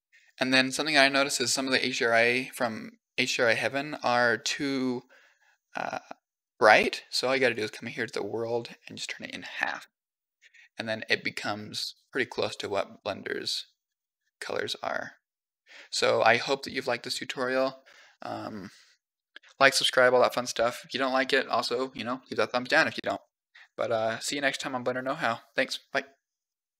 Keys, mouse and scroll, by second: 3.1 click, 7.3 click, 8.8 click, 11.6 g.